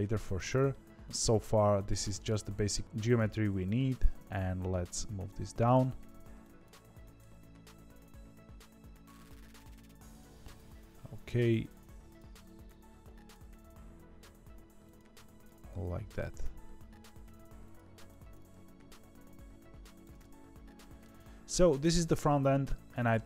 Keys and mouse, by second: 0.6-2.2 middle drag, 3.4 KP_1, 4.0 g, 5.9 1, 6.3 click, 7.1 click, 7.2 g, 11.0-12.1 drag, 12.7 click, 13.3 g, 15.5 click, 15.7 g, 18.0 click, 20.1 middle click, 20.1 g, 21.4 middle click, 22.9 middle click.